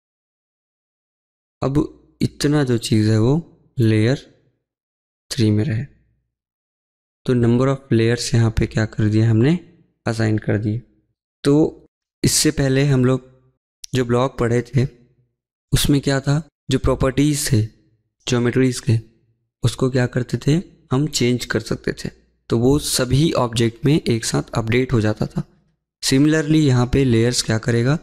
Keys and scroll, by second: 2.7 Escape, 2.8 Escape, 2.9 Escape, 9.2 Escape.